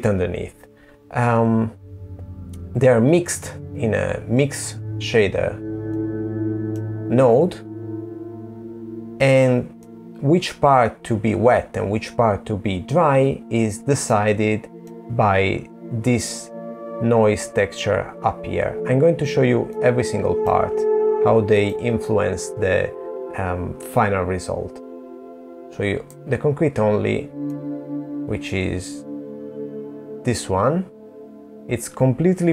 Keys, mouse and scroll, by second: 3.1-3.8 scroll up 4, 3.8 middle click, 4.8-5.8 scroll up 2, 5.8-6.2 scroll down 5, 6.7-7.5 scroll down 2, 7.5 middle click, 11.8 middle click, 17.4 middle click, 18.6-19.3 scroll down 3, 19.3 middle click, 22.7 scroll down 2, 23.3 middle click, 24.5 middle click, 25.4 click, 26.1 middle click, 31.5 middle click.